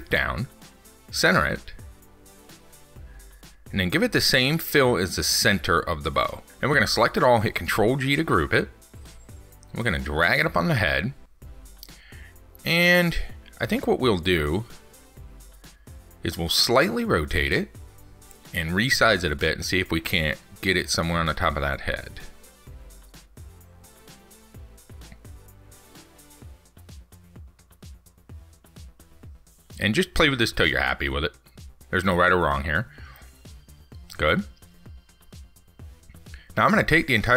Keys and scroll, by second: 8.5 ctrl+g, 21.8 ctrl+z.